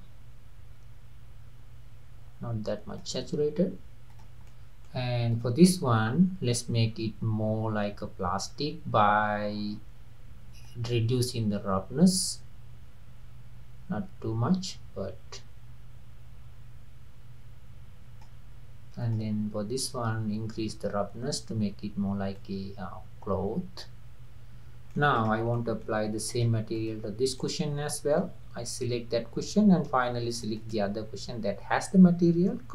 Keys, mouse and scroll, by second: 4.1 click, 4.5-5.3 middle drag, 5.3 drag, 6.5-9.5 scroll down 6, 10.7-13.8 drag, 19.0 click, 22.3-25.0 drag, 25.0 middle click, 25.1 drag, 25.6-26.3 middle drag, 26.3 drag, 26.8 click, 27.4-30.4 middle drag, 30.4 shift+click.